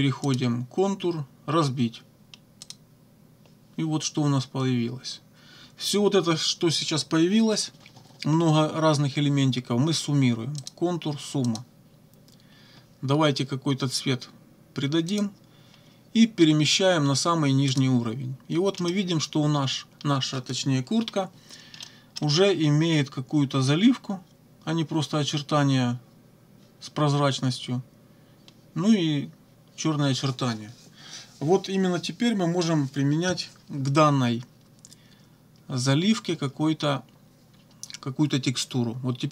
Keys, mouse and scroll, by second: 0.3 click, 2.7 click, 10.6 click, 11.5 click, 15.1 click, 17.7 click, 18.7 click, 21.8 click.